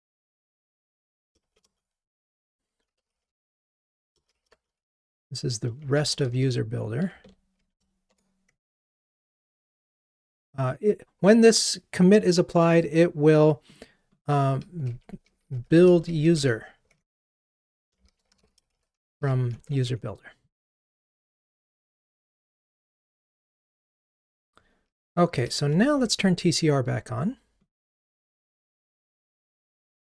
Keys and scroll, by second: 8.1 Tab, 19.5 Delete.